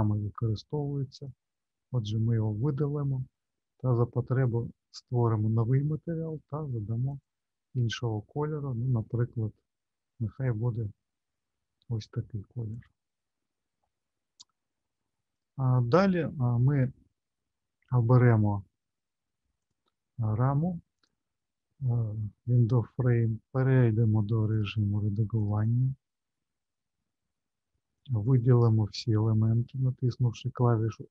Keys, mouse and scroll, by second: 1.1 click, 5.1 click, 7.1 click, 15.3 click, 18.1 scroll up 1, 19.5 click, 24.5 click, 26.7-27.5 scroll up 1, 28.3 middle click, 29.7 a.